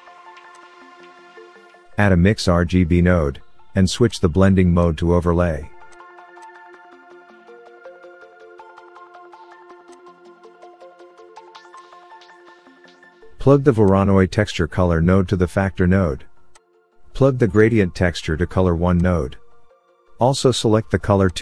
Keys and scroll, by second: 2.4 shift+a.